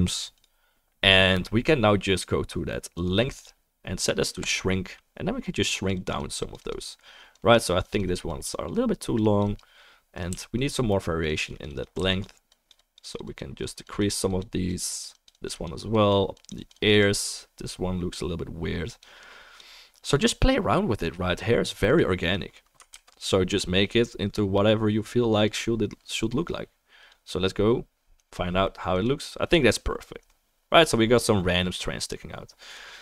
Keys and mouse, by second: 5.7-10.6 drag, 10.3 f, 11.0-12.2 drag, 12.0 f, 12.5-26.4 drag, 22.9 ctrl+s, 28.9 click.